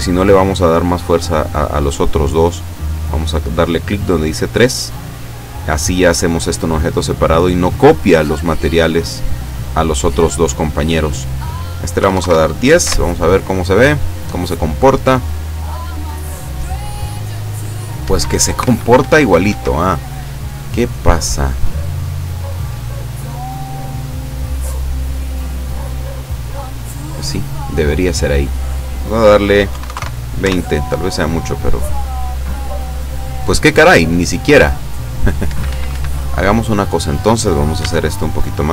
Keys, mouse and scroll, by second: 3.8 click, 11.0 click, 12.0 1, 12.2 KP_Enter, 12.9 F12, 18.0 Escape, 19.9 scroll down 1, 20.9 middle click, 22.1-23.0 drag, 23.9-27.7 middle drag, 28.2 click, 29.7 KP_2, 29.9 KP_0, 30.0 KP_Enter, 30.4 F12, 35.6 Escape, 36.5 middle click, 37.8 s, 38.6 click.